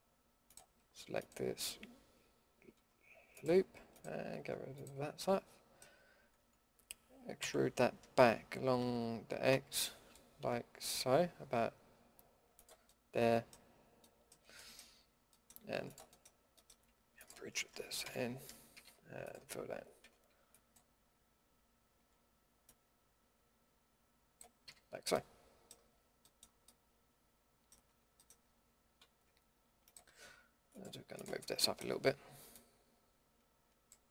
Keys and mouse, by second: 7.4 e, 13.3 middle click, 18.0 f, 18.7 a, 20.0 ctrl+f, 22.6-24.3 drag, 24.6 a, 25.2 click, 26.0 Tab, 27.9 Tab, 33.1-34.1 drag.